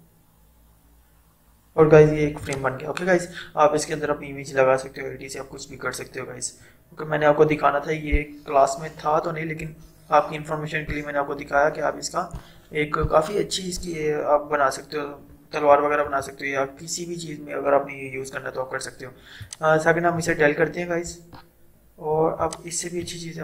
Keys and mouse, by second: 16.1 ctrl+0, 19.6 click, 20.8 Delete, 22.5 click.